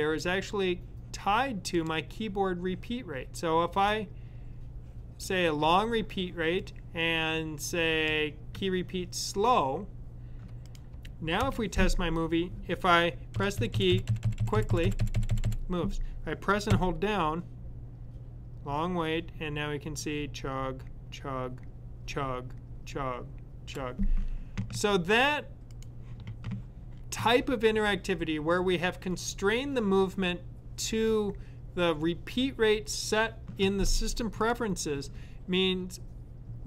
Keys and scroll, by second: 13.3 Right, 13.7-15.3 typing, 16.5 Right.